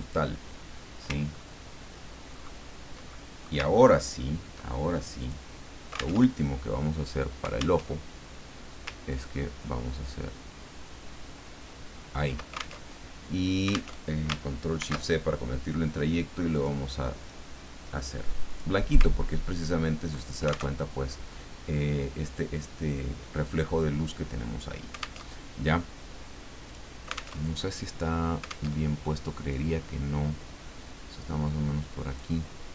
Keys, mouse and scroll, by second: 0.0 click, 1.2-1.9 ctrl+scroll down 1, 2.3-2.6 ctrl+scroll up 1, 3.1 ctrl+middle click, 3.7-4.1 ctrl+scroll up 1, 5.2 click, 6.2 alt+Tab, 7.8 alt+Tab, 9.1-12.5 ctrl+drag, 12.9 ctrl+alt+Tab, 13.9 alt+Tab, 14.8 ctrl+shift+c, 16.5 click, 18.5 click, 19.1-19.8 ctrl+scroll down 2, 20.8 alt+Tab, 25.3 alt+Tab, 26.6 click, 27.4 alt+Tab, 28.7 alt+Tab, 29.5-32.3 drag.